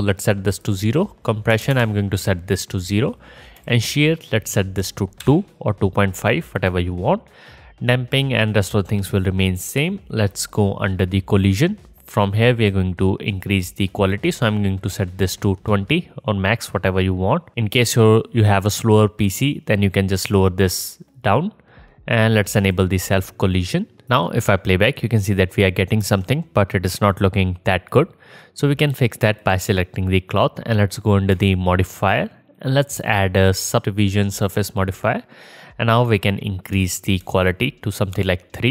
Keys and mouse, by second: 6.7-11.4 drag, 22.8-24.0 drag, 24.1 space, 26.1 space, 29.5-32.6 drag.